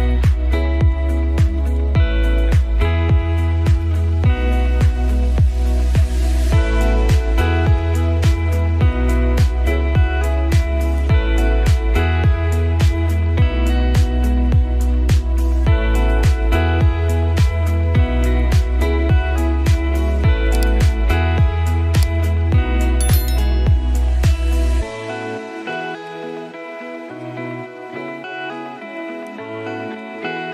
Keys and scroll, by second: 4.6 ctrl+a, 5.3 ctrl+c, 15.4 ctrl+3, 18.1 ctrl+v, 20.7 ctrl+alt+3, 21.7 ctrl+space.